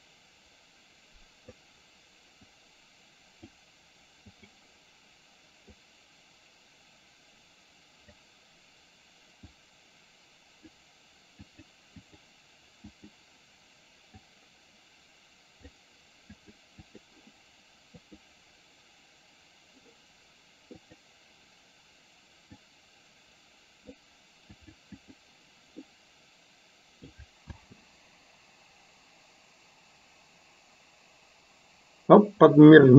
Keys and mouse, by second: 2.7-3.7 drag, 4.5 click, 6.0-8.3 drag, 9.6-10.8 drag, 11.6 click, 12.2 click, 13.1 click, 14.3-15.8 drag, 16.5 click, 17.1 click, 18.2 click, 21.0 click, 22.8-24.1 drag, 24.7 click, 26.0-27.2 middle drag, 27.7 space.